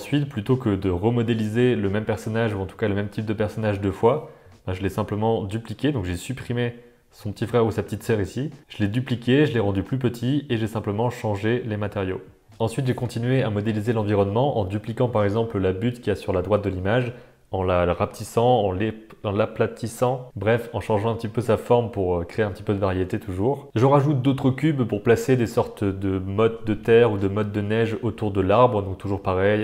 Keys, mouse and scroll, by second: 0.1 middle click, 0.3 shift+middle click, 0.4 Tab, 1.0-2.8 typing, 1.3 alt+z, 1.8 middle click, 1.8 Tab, 1.9 Tab, 1.9 alt+z, 2.0 middle click, 2.4 shift+click, 2.6 middle click, 3.2 alt+a, 3.3 Tab, 3.3 middle click, 4.0-6.8 typing, 4.1 middle click, 4.3 ctrl+j, 5.5 click, 6.0 click, 6.4 click, 6.8 middle click, 7.6 middle click, 7.8-8.6 typing, 8.2 click, 8.9 Tab, 8.9 middle click, 9.5 Tab, 9.5 middle click, 9.9 click, 10.3 click, 10.6 Tab, 10.6 middle click, 10.9 click, 11.3 Tab, 11.3 middle click, 11.5 alt+a, 12.5 middle click, 12.6 alt+a, 12.8 shift+middle click, 12.9 middle click, 13.5 middle drag, 13.7 shift+d, 14.4 r, 15.5 shift+middle click, 15.9-17.6 typing, 18.4-19.1 middle drag, 19.2 g, 19.6 g, 20.0 g, 20.8 shift+click, 21.0 z, 21.3 click, 22.0 alt+z, 22.3 click, 22.5 shift+click, 22.7 g, 22.9 g, 23.4 Tab, 23.6 middle click, 23.7 click, 24.4 middle click, 24.7-29.2 typing, 26.3 shift+middle click, 26.4 middle click, 26.7 middle click, 28.9 middle click.